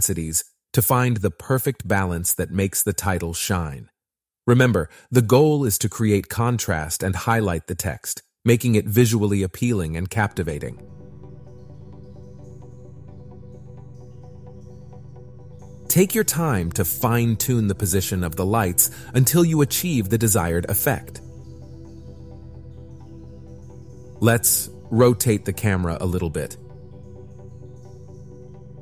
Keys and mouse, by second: 0.0 click, 0.6 click, 2.8 click, 5.5 r, 5.8 r, 10.1 click, 10.2 ctrl+z, 11.4 click, 13.4 click, 14.2 click, 24.3 click, 26.5 middle click.